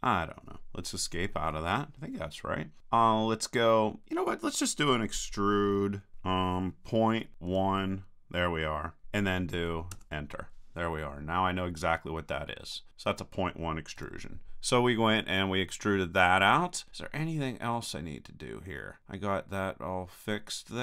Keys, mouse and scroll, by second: 6.1 e, 12.7-14.0 middle drag, 14.0 KP_1, 17.7-19.3 middle drag, 19.3 click, 20.3 middle click.